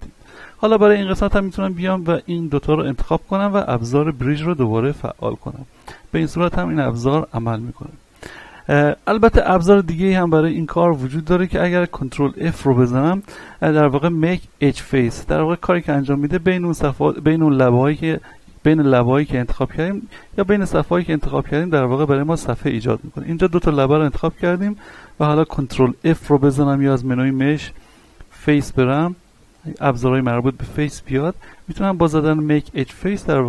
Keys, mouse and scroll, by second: 1.1 right click, 2.6 shift+right click, 5.2 w, 5.8 click, 7.0-8.8 scroll down 1, 8.8 ctrl+z, 9.2-9.8 scroll up 1, 9.8-10.2 scroll down 1, 10.5 shift+middle click, 11.7 ctrl+f, 23.6 right click, 24.2 shift+right click, 26.1 ctrl+f, 27.2 click.